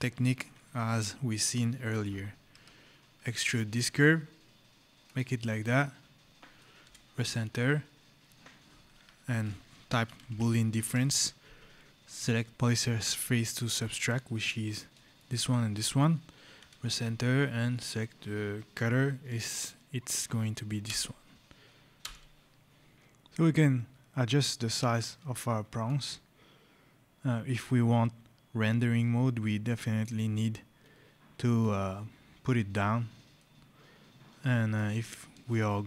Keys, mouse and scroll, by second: 2.4 e, 3.3 Return, 4.9 click, 6.7 Return, 8.9 Escape, 9.9 b, 10.4 o, 10.7 Return, 13.6 click, 15.0 click, 16.4 Return, 17.6 click, 20.7 Return, 22.9 shift+click, 25.7 click, 33.2 right click, 35.3 shift+right click.